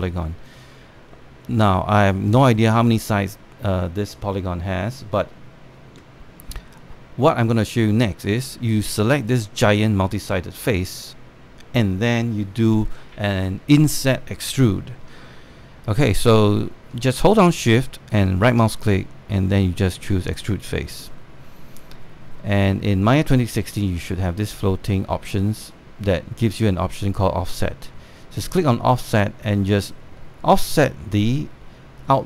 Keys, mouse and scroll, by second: 6.9 scroll down 1, 7.0 scroll up 1, 7.7-8.9 scroll down 1, 8.9 right click, 10.3 click, 18.8-22.4 shift+right drag, 29.6-32.2 drag.